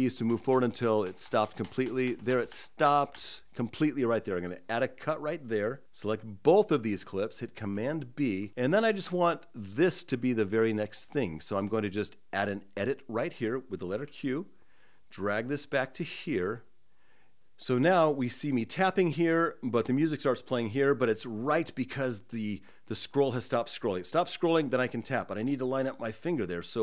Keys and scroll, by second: 0.1 Right, 1.3 Right, 1.9 Right, 2.7 Right, 7.4 super+b, 13.5 q.